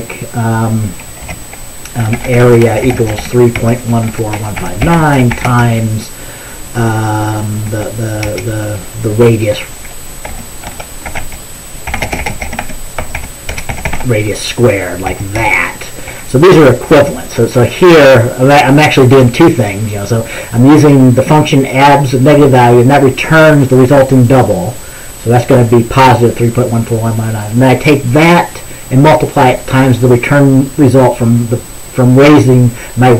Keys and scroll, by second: 1.9-6.1 typing, 7.5-8.5 typing, 10.2-17.8 typing.